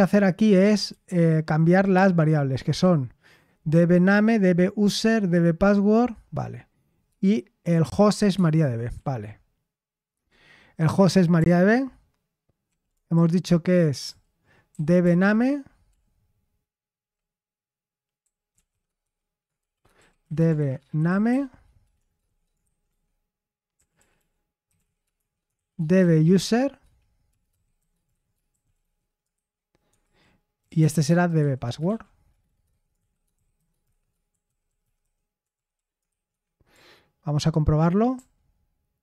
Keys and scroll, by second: 1.0 ctrl+u, 8.1-13.1 typing, 13.1 ctrl+u, 14.0 ctrl+u, 14.6 ctrl+d, 15.0 ctrl+d, 15.6-16.8 typing, 17.9-36.7 typing, 22.8 Escape, 38.1 ctrl+u, 38.1 typing.